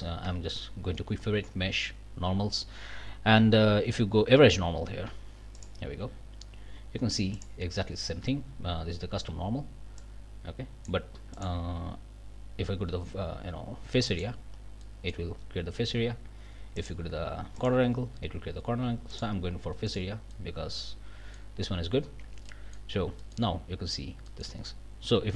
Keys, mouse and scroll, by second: 0.2 q, 5.5 click, 7.3 click, 10.0-11.0 drag, 11.3 click, 14.1 click, 14.8 click, 16.8 click, 17.6 click, 19.1 click, 19.9 click, 20.3-21.6 middle drag, 22.2 Tab, 22.5 middle click, 23.2 click, 24.3 click.